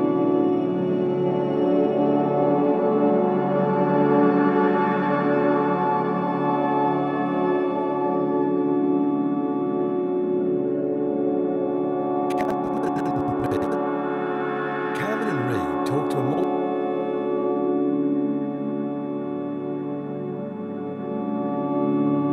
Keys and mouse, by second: 0.0-0.2 typing, 3.6 click, 4.2-4.9 typing, 7.4 click, 7.9 click, 9.8 click, 10.1 click, 11.1-13.9 drag, 16.2 space, 17.8 click, 18.8 click, 19.3 click, 21.1 click, 22.2 click.